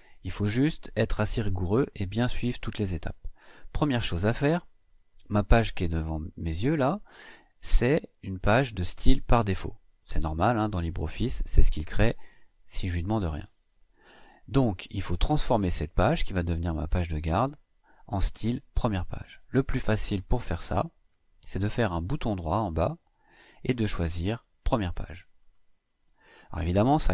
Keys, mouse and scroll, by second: 21.8 click, 25.2 click.